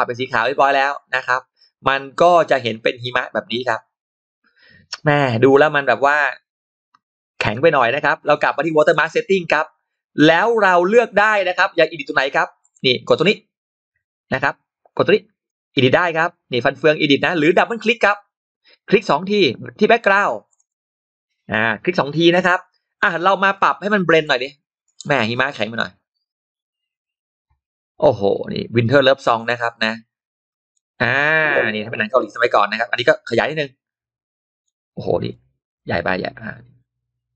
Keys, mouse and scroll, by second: 2.1-3.5 middle drag, 3.9 scroll up 1, 8.8 click, 12.5 click, 14.8 click, 15.8 click, 19.1 click, 20.4 click, 20.5 click, 23.2 click, 24.1-30.6 drag, 31.0 middle click, 33.3-34.5 drag, 34.5 middle click, 35.2-37.3 drag.